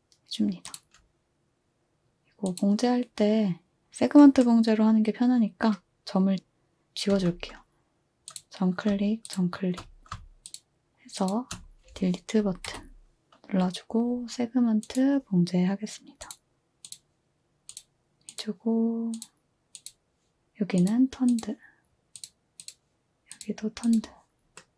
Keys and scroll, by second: 7.1 z, 12.7 Delete.